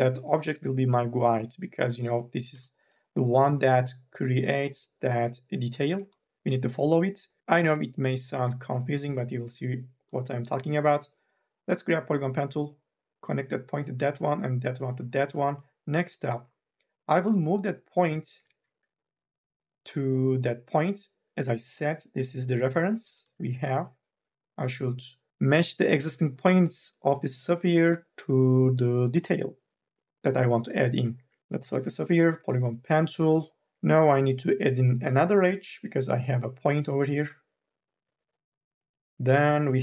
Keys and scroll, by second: 2.2 2, 2.6 e, 7.4 1, 18.6 ctrl+z, 22.8 3, 23.1 e, 31.0 1, 31.4 m, 31.4 w, 31.4 1.